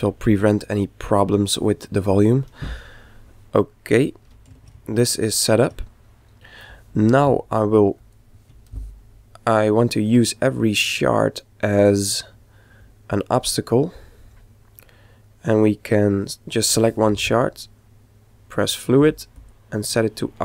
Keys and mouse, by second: 8.0 click, 9.5-11.5 middle drag, 10.8-12.6 right drag, 15.2-17.1 right drag, 18.2-20.4 drag.